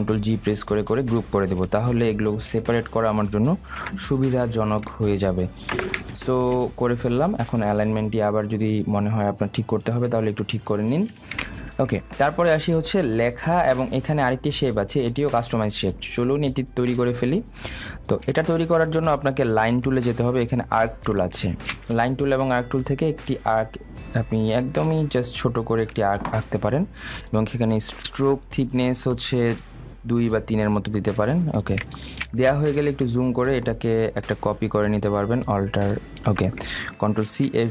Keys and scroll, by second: 0.8 ctrl+g, 6.9 ctrl+space.